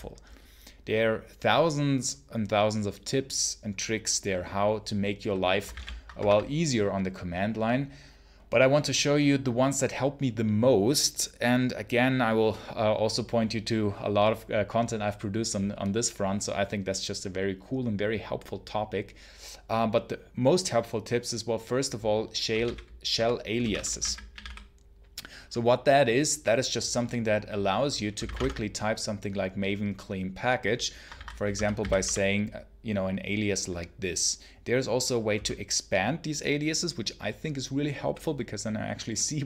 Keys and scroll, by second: 5.6 ctrl+c, 5.6 ctrl+l, 5.9 ctrl+Return, 22.1-25.3 typing, 27.8-28.7 typing, 31.0 ctrl+c, 31.1-32.4 typing, 35.2 space.